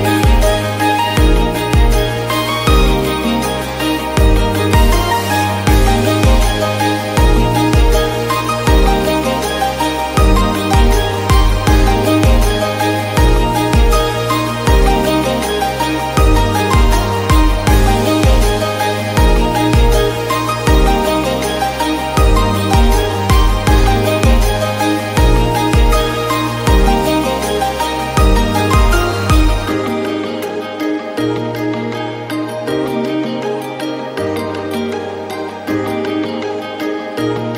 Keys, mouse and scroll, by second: 1.3-2.0 scroll up 2, 2.0 click, 2.5 n, 2.7 scroll up 1, 2.9 shift+middle click, 3.7 u, 4.5 click, 4.9 a, 5.2 r, 6.4 g, 7.3 scroll up 1, 7.6 s, 8.2 scroll up 1, 8.4 shift+middle click, 8.5 scroll down 1, 9.1 click, 9.9 l, 10.2 g, 11.5 click, 11.6 l, 11.9 g, 12.7 click, 13.2 g, 14.3 click, 14.6 l, 14.9 g, 16.5-19.6 typing, 17.8 click, 19.3 click, 20.4 click, 20.7 l, 20.9 g, 22.1 click, 22.3 l, 22.5 g, 23.9 Tab, 24.3 scroll down 2, 24.6 Tab, 25.3 click, 25.5 scroll down 1, 25.9 ctrl+s, 26.0 scroll up 1, 26.3-26.6 shift+middle drag, 26.6 KP_1, 26.8 click, 27.4-28.4 drag, 28.4 KP_Divide, 28.7 click, 29.0 click, 29.5 h, 29.7 scroll up 1, 29.8 shift+middle drag, 30.0 scroll down 2, 30.2-30.5 shift+middle drag, 30.5 click, 30.8 g, 31.7 scroll up 1, 31.9 drag, 32.2 shift+a, 33.4 s, 34.0 s, 34.3 click, 34.6 scroll up 2, 34.7 shift+middle click, 34.9-35.4 scroll down 2, 35.4 click, 35.7 middle click, 36.3-37.3 drag.